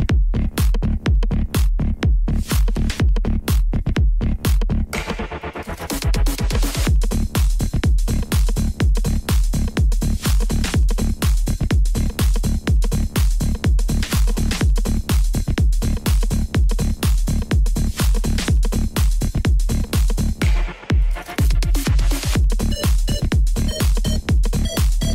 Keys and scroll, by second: 0.4 Tab, 1.1 c, 1.7 Return, 3.2 s, 3.7 Escape, 4.5 b, 5.4 s, 6.2 Tab, 7.6 z, 8.8 z, 8.9 alt+a, 13.2 g, 13.3 shift+z, 14.9 r, 15.7 z, 17.1 alt+a, 18.3 Tab, 19.6 alt+a, 19.8 c, 21.6 Return, 22.2 c, 23.2 Return.